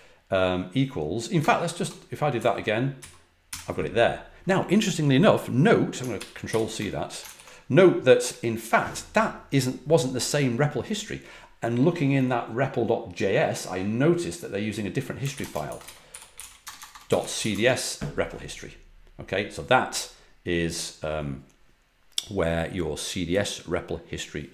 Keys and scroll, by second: 1.3-3.4 typing, 6.1 ctrl+c, 6.4 ctrl+c, 7.2 ctrl+c, 14.9-17.8 typing.